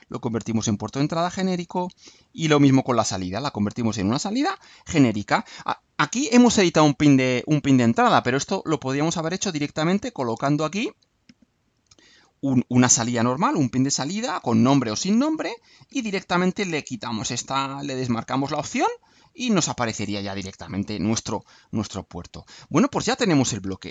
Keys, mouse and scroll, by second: 0.5 click, 1.2 click, 2.2 click, 3.8 click, 4.5 click, 10.0 click, 14.1-15.3 typing, 16.9 click, 18.4 click, 19.3 click, 20.8-22.0 drag, 22.2 Delete.